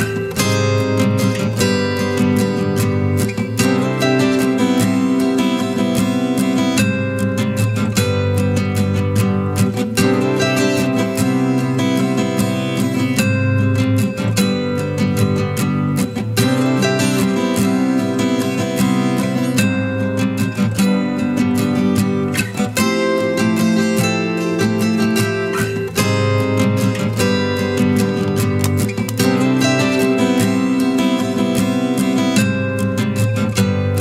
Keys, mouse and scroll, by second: 0.3 typing, 3.0-3.6 typing, 11.6 typing, 29.9 double click, 31.0 right click, 33.8 ctrl+z.